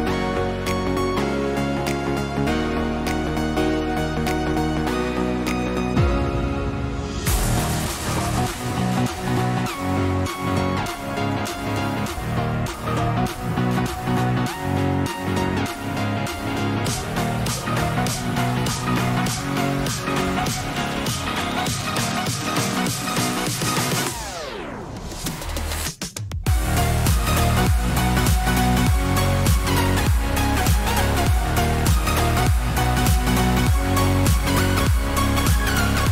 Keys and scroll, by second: 2.0 ctrl+-, 2.3 ctrl+-, 5.8 ].